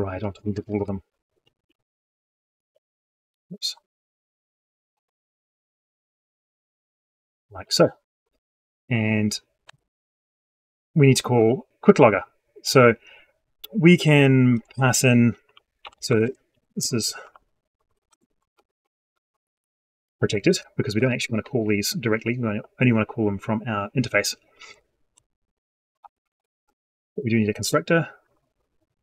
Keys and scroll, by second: 0.6 ctrl+shift+Left, 1.4 ctrl+c, 1.9 ctrl+v, 2.6 ctrl+End, 5.0 ctrl+v, 9.5 ctrl+shift+c.